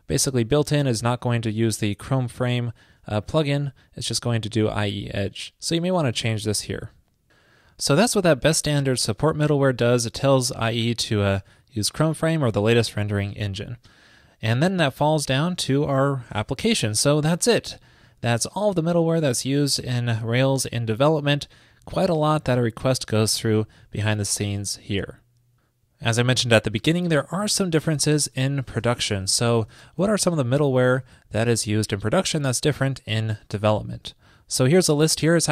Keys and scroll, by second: 9.0 super+v, 11.1 super+v.